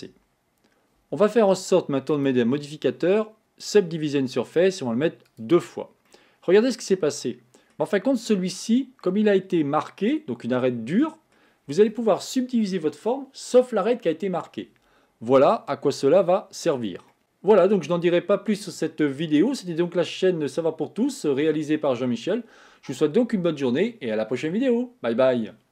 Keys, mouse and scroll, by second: 0.2 Tab, 1.1 Tab, 2.2-5.2 drag, 5.3 click, 6.2-12.2 middle drag.